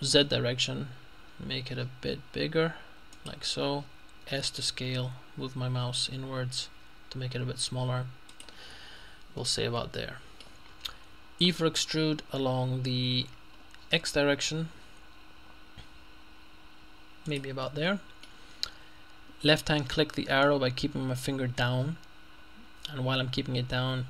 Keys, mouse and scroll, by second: 0.2 z, 3.2 click, 4.2 s, 8.4 click, 8.7-9.4 scroll down 1, 9.4 scroll down 1, 9.4 middle click, 11.5 e, 14.0 x, 17.3 click, 21.0-24.0 drag.